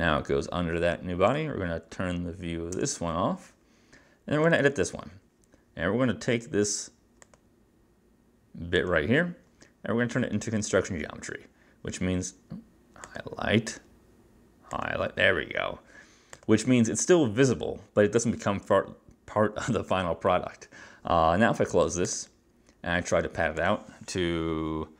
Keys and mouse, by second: 1.4 click, 2.9 space, 4.6 click, 4.7 click, 7.4 click, 8.9 click, 13.2 click, 14.8 click, 16.4 click, 22.1 click, 23.7 click.